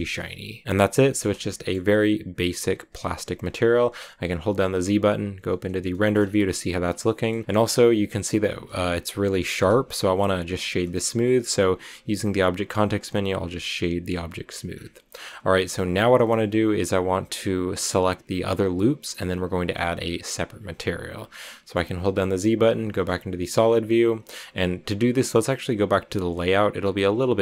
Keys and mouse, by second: 1.3 shift+middle drag, 4.4 z, 5.8 shift+middle drag, 6.9-7.2 shift+middle drag, 12.7 w, 21.3 click, 22.2 z.